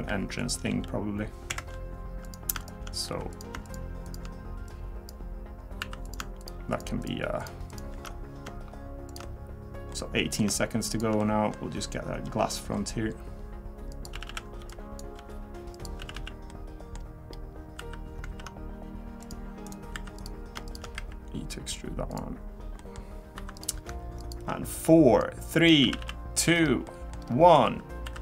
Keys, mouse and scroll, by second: 0.1 e, 0.7 s, 2.2 click, 2.6 shift+click, 3.1 2, 3.3 click, 3.6 shift+click, 4.0 shift+click, 4.7 click, 5.8 3, 6.0 click, 6.4 shift+click, 6.7 shift+click, 7.0 click, 7.7 shift+click, 9.1 shift+click, 9.9 middle click, 10.9 shift+click, 11.2 middle click, 12.3 g, 14.1-16.2 typing, 16.5 middle click, 17.8 3, 18.3 ctrl+r, 20.0 3, 20.2 click, 20.7 shift+click, 21.0 e, 22.8 middle click, 23.4 2, 23.6 click, 24.2 shift+click, 25.2 click, 25.8 a, 26.0 a, 26.1 middle click, 26.5-27.2 scroll down 3, 26.8 middle click, 27.2-28.0 scroll up 3, 27.6 3, 28.0 3.